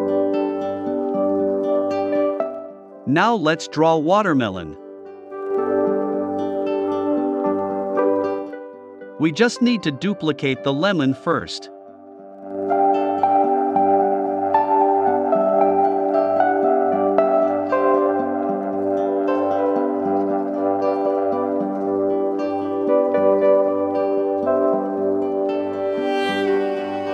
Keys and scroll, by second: 2.3 super+c, 2.7 super+f, 3.1 shift+Left, 4.0 shift+Left, 4.6 shift+Left, 7.3 shift+Right, 14.8 BackSpace, 26.9 i.